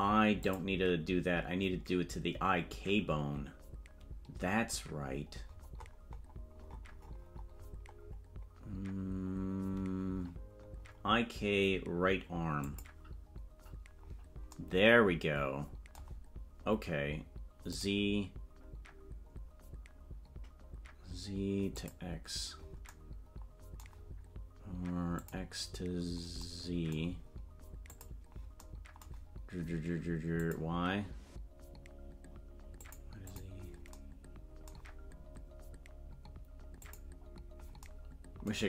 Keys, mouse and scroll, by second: 0.4-13.3 drag, 17.7 click, 21.7 click, 25.1 click, 27.8 click, 30.3 click, 32.8 click, 33.2 click, 36.7 click.